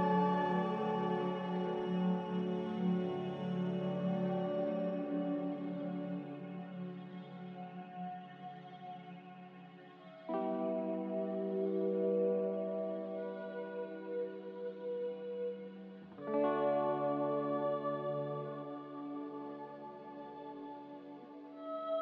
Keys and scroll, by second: 0.9 z, 4.3 typing, 7.4 1, 9.3 g, 12.3 Escape, 12.5 Escape, 13.7 Escape, 13.7 m, 15.0 x, 19.2-19.5 typing, 19.7 Return, 21.7 m.